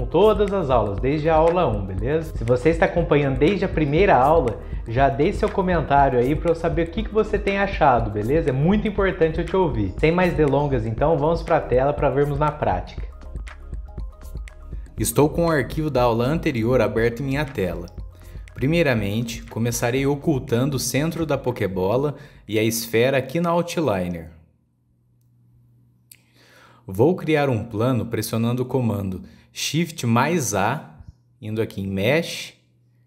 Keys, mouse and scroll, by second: 0.6 scroll up 1, 0.6 scroll down 1, 1.9 click, 2.6-3.8 drag, 4.0 shift+middle click, 5.8 click, 7.8 click, 8.2-8.8 scroll up 1, 8.8-9.2 drag, 9.2 middle click, 9.4 scroll up 1, 9.7 shift+a, 11.8 scroll up 7, 11.9 click, 13.2 shift+middle click, 19.7-22.7 middle drag, 25.0 click, 26.0-26.8 drag, 26.8 scroll down 2, 27.0-27.9 middle drag, 27.9-28.4 scroll down 3, 28.4-31.2 shift+middle drag, 31.2 shift+a.